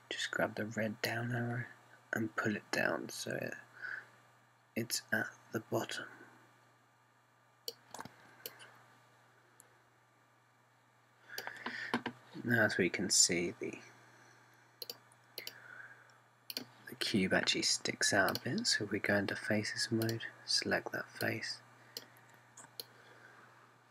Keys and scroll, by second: 0.2 super+z.